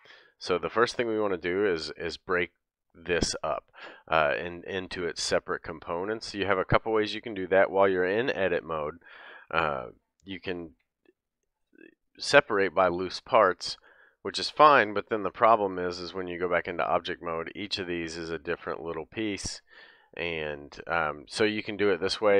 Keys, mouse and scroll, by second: 0.2 l, 0.6-1.3 scroll down 3, 4.8-6.6 scroll up 1, 7.3-10.7 middle drag, 7.3-7.8 scroll up 1, 8.7 a, 10.7 p, 15.1 Tab, 16.3 click, 17.6 shift+click, 18.5 shift+click, 19.5 shift+click, 20.1 shift+click, 21.6 shift+click.